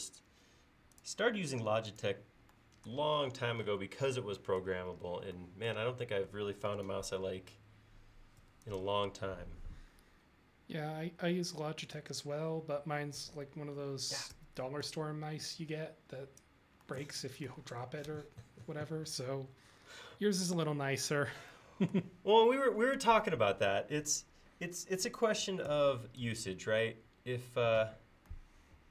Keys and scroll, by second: 8.5 space, 13.3 s, 14.4 f, 18.2 Escape, 25.8 p.